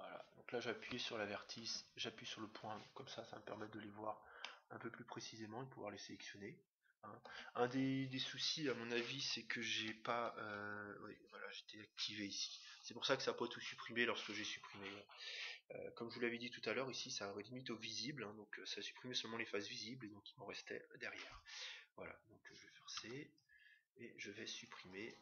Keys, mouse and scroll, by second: 4.4-6.2 middle drag, 22.9 c.